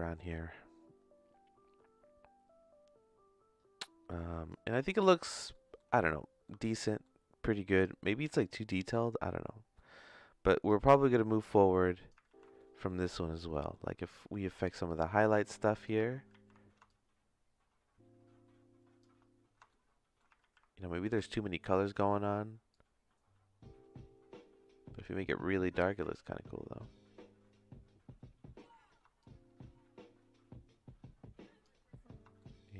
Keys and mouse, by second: 1.5-4.5 drag, 4.8 ctrl+z, 5.5 middle click, 6.0 shift+middle click, 6.7 middle click, 7.7 click, 8.5 middle click, 9.7 middle click, 10.6-12.1 drag, 12.3 ctrl+z, 12.6 middle click, 13.2 middle click, 13.6 middle click, 15.0 click, 16.3 ctrl+z, 16.9-19.0 drag, 19.7 shift+middle click, 20.4 ctrl+z, 21.3 shift+middle click, 22.7-28.5 shift+drag, 29.2-31.6 shift+drag, 32.4-32.7 shift+middle drag.